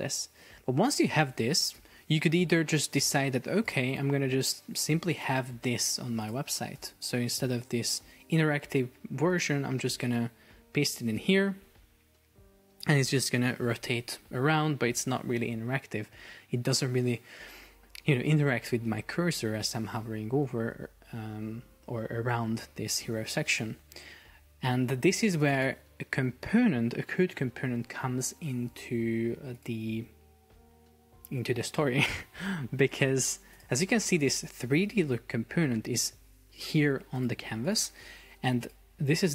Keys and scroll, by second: 0.5 shift+Down, 0.7 shift+Up, 12.3 super+p, 20.4 Escape, 24.0 super+z.